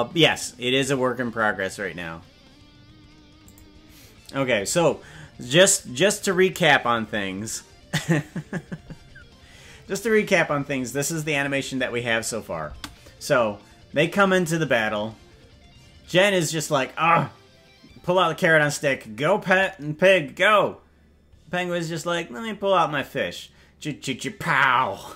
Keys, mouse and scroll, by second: 3.4 click, 12.7 space.